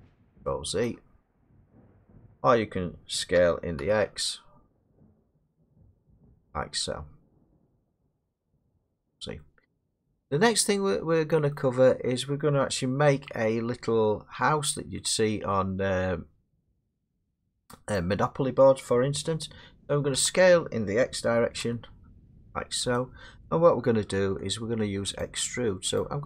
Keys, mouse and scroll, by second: 0.6 ctrl+z, 2.0 middle click, 3.4-3.8 typing, 5.4 click, 8.0 middle click, 8.9 ctrl+z, 9.9 middle click, 10.3 scroll, 11.5 middle click, 14.7 middle click, 15.5 middle click, 16.5-17.1 scroll down 5, 17.9 middle click, 18.7-20.0 scroll, 20.1 s, 21.6 x, 23.1 click, 25.2 click, 26.0 click.